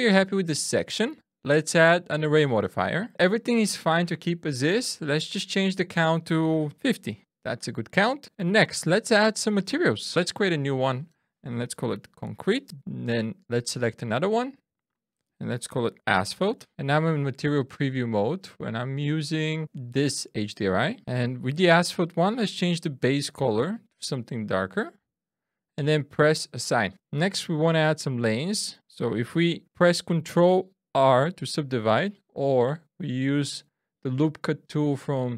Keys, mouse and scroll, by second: 0.5 Tab, 3.0 click, 6.0 click, 8.7 Tab, 9.6 click, 10.7 click, 13.5 click, 14.4 click, 14.9 click, 18.7 click, 23.0 click, 26.2 click, 29.3 ctrl+r.